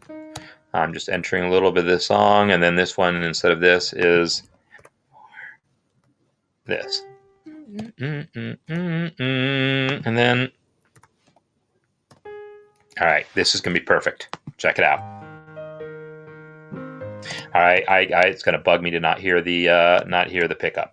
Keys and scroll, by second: 3.1 Escape, 4.1-6.5 typing, 7.2 Escape, 10.1 typing, 11.3-13.4 typing, 12.7 Escape, 14.7 typing, 17.2 typing, 20.3 typing.